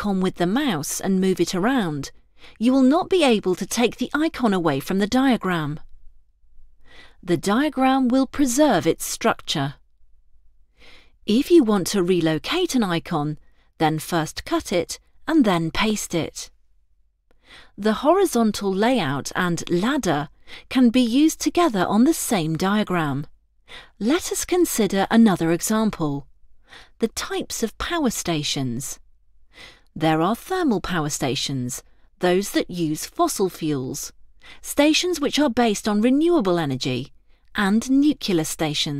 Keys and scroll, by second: 31.9 ctrl+Return, 35.7 ctrl+Return, 37.5 ctrl+Return.